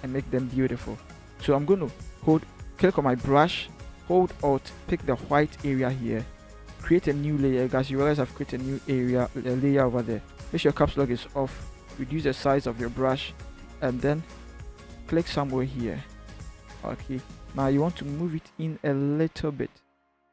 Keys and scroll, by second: 10.8 Caps_Lock, 12.0-12.9 typing, 16.8 v.